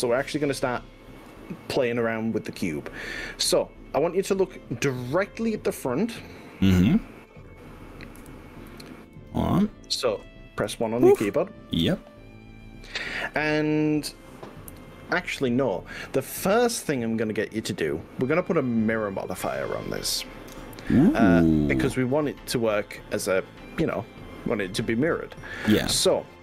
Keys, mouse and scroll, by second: 0.3 g, 8.3 KP_1, 9.3 click, 10.7 ctrl+z, 11.3 KP_1, 22.9-23.3 scroll up 2, 23.6-24.9 middle drag, 25.1 middle click, 25.5 middle click.